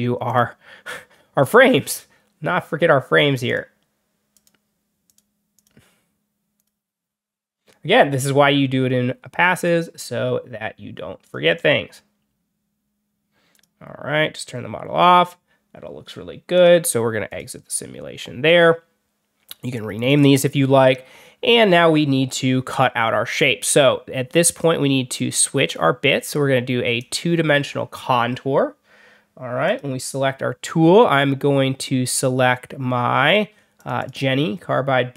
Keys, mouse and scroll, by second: 0.2 click, 3.3 click, 4.2 click, 4.9 click, 5.4 click, 6.5 click, 9.4 click, 11.1 click, 13.4 click, 16.4 click, 17.2 click, 20.0 click, 23.6 click, 24.4 click, 25.0 click, 26.9 click, 29.6 click, 33.7 click, 33.9 click.